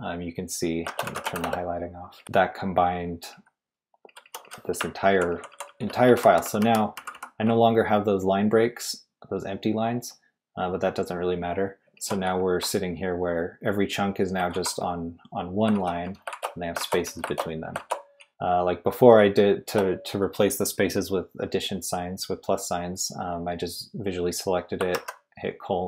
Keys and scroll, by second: 0.8-4.4 typing, 5.1 ctrl+d, 5.3 ctrl+d, 5.5 ctrl+d, 6.1 ctrl+u, 6.3 ctrl+u, 6.4 ctrl+u, 11.6-18.8 typing, 24.9 shift+;.